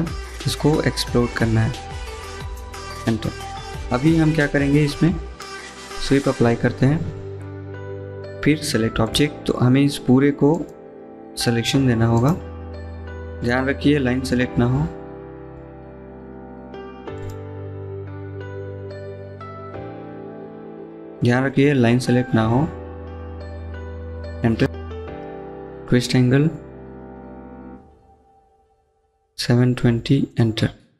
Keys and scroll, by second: 0.1 x, 4.7-5.7 typing, 27.7 typing, 29.3-30.1 typing.